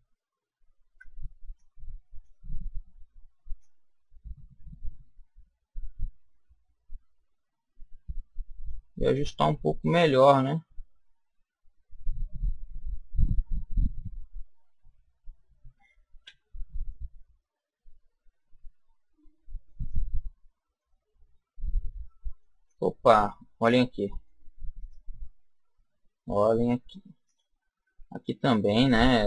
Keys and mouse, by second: 0.7 b, 3.5 click, 16.1 a, 16.8-18.6 middle drag, 19.8-22.6 middle drag, 22.6-23.8 middle drag, 24.7-26.6 right drag, 28.1-29.2 right drag.